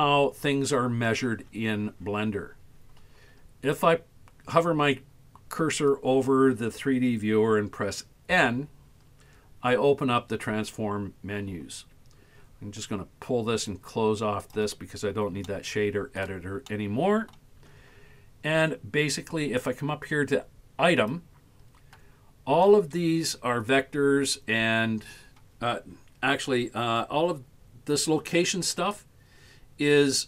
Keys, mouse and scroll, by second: 8.3 n, 13.7 click, 15.5-16.2 shift+middle drag, 16.8 middle click, 20.9 click.